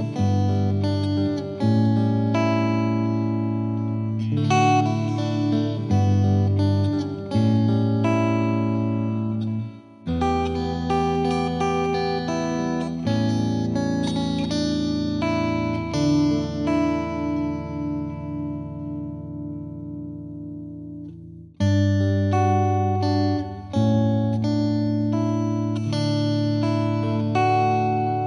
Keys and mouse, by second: 2.0 click, 3.0 click, 3.6 click, 5.4 right click, 5.6 click, 6.8 click, 7.1 shift+click, 8.9 shift+click, 11.1 click, 11.4 click, 12.5 click, 17.0 click, 18.1 click, 18.7 click, 20.3 click, 20.6 click, 21.3 click, 23.0 click, 25.6 click.